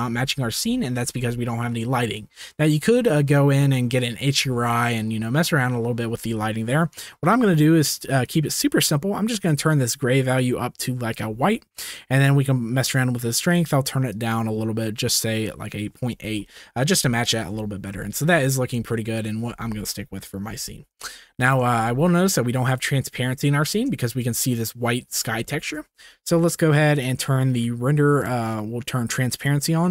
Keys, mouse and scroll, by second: 0.1 ctrl+s, 8.2 click, 9.4 click, 13.5 click, 14.2-16.9 drag, 16.9-17.4 shift+middle drag, 18.1 shift+middle drag, 20.5 ctrl+s, 25.5 shift+middle click, 26.9 middle click, 26.9 scroll down 1, 28.1 click, 29.4 drag.